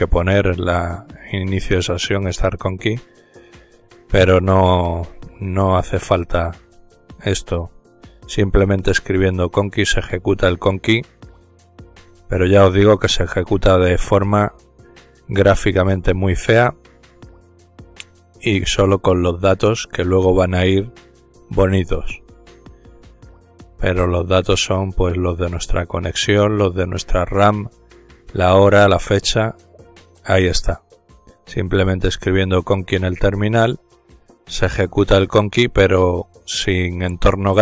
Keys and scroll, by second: 3.6-7.2 typing, 25.3 ctrl+z, 26.8-28.5 typing, 29.1 Return, 31.6 typing.